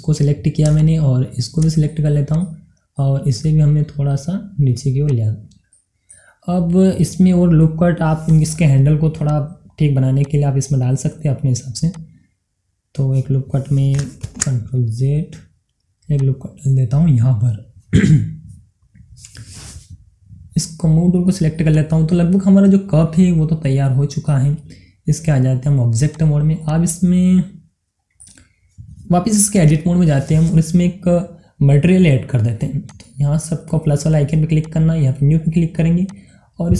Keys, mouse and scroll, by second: 0.4 middle click, 0.7 click, 2.3 shift+click, 2.9-5.1 middle drag, 5.1-6.7 drag, 6.7-8.2 middle drag, 8.2 click, 9.3 click, 15.0 ctrl+Num_Lock, 15.0 click, 15.2 ctrl+z, 16.1-20.9 drag, 21.8 click, 22.6-26.0 middle drag, 26.0 click, 27.4 scroll down 1, 27.6-29.4 middle drag, 29.4 scroll up 1, 30.5 Tab, 32.8 click.